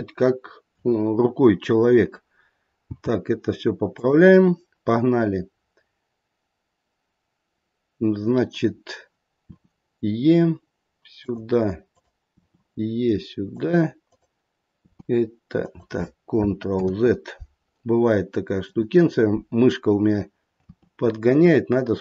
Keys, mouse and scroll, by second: 2.8 g, 9.5 e, 11.9 click, 12.3 e, 14.1 click, 14.7 e, 16.7 ctrl+z, 18.6 click, 20.6 e.